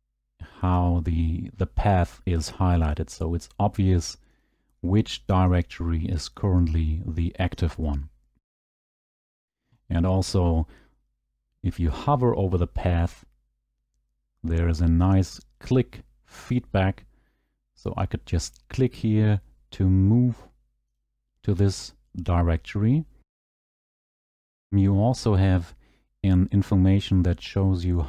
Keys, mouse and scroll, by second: 0.2 click, 2.9 click, 4.4 click, 5.6 click, 6.5 click, 7.7 click, 8.7 click, 9.6 click, 9.8 click, 21.0 click.